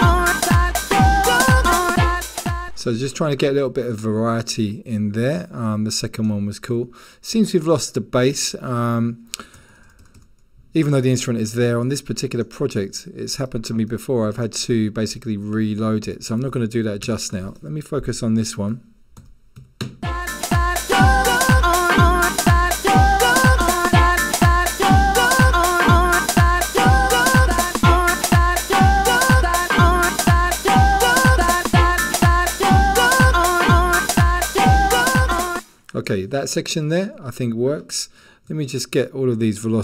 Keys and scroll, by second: 9.6-10.2 typing, 11.8-12.2 typing, 18.9-20.1 typing.